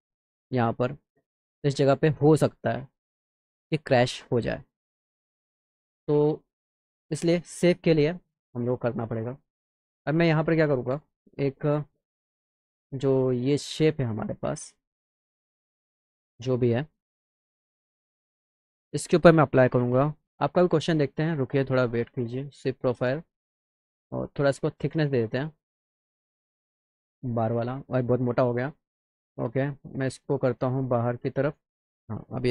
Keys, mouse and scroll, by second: 0.9 click, 3.3 middle click, 4.1 alt+middle click, 7.0 click, 9.9 click, 11.4 click, 13.5 click, 18.8 click, 20.6 click, 23.3 click, 25.0 click, 25.9 click, 26.8 click, 28.9-29.5 drag, 29.7-30.3 scroll down 2, 30.6 click.